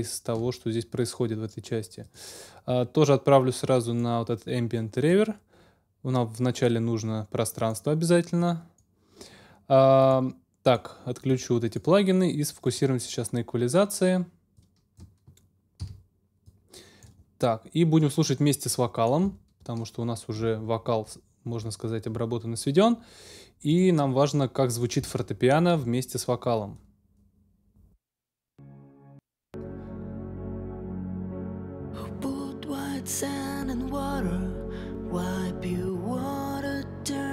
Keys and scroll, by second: 15.8 x, 28.2 space.